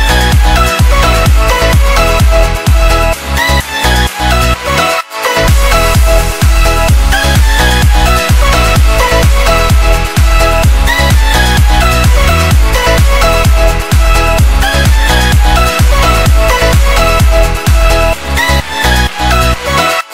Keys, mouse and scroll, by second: 13.7 click, 14.9 click.